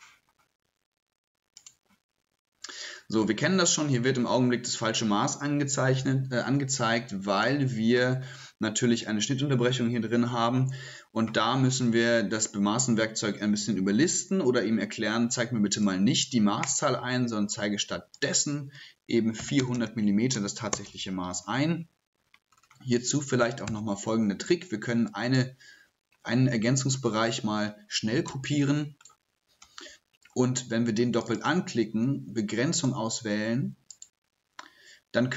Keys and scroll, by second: 28.3 ctrl+m.